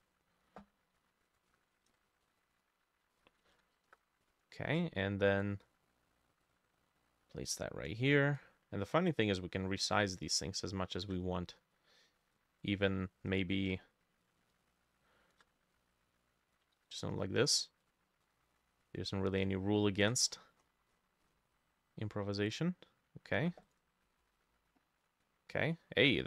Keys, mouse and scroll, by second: 1.0 Escape, 1.5 F2, 1.9 ctrl+c, 2.3 Escape, 3.2 F2, 3.5 ctrl+v, 3.9 Return, 9.0 shift+click, 12.2 ctrl+d, 14.6 shift+click, 16.8 ctrl+d, 18.3 double click, 19.9-23.4 shift+drag, 19.9 shift+middle click, 20.3-22.5 scroll up 27, 24.1-26.2 drag, 25.7-26.2 scroll down 2.